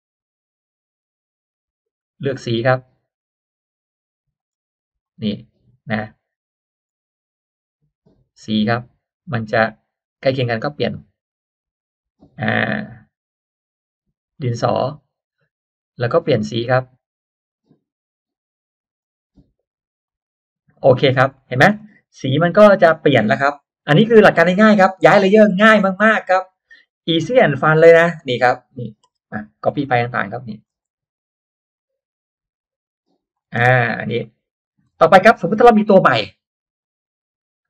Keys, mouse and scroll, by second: 0.3 click, 1.1 click, 1.8 click, 4.3 click, 5.0 click, 6.8 click, 8.2 click, 9.6 click, 10.8 click, 11.6 click, 12.3 middle click, 12.7-13.0 scroll up 1, 14.3 click, 16.0 click, 18.8 click, 20.0 click, 20.6 click, 21.0 scroll down 1, 21.3 middle click, 21.6-22.0 scroll up 1, 25.4-26.0 scroll down 1, 25.6 middle click, 26.1 middle click, 26.3 scroll down 1, 26.8-27.1 scroll up 1, 27.2 scroll down 1, 27.7 click, 28.2-28.6 scroll down 1, 29.0 m, 29.3 click, 30.4 click, 33.2 click, 33.6 click, 33.6 space, 33.8-34.2 scroll up 1, 34.2 middle click, 34.4 scroll down 1, 34.4 space, 34.8-35.4 scroll up 1, 37.4 click.